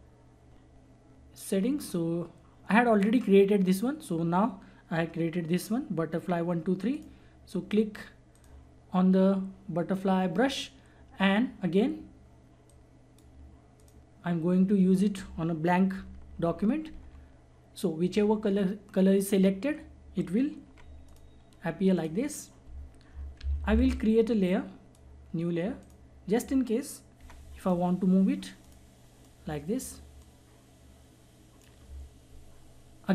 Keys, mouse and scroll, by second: 1.5-3.5 scroll down 1, 6.9 click, 12.6 click, 15.9-17.2 typing, 20.6 ], 21.0 click, 23.4 ctrl+z, 24.4 click, 24.5 click, 27.2 ], 27.6-33.1 drag.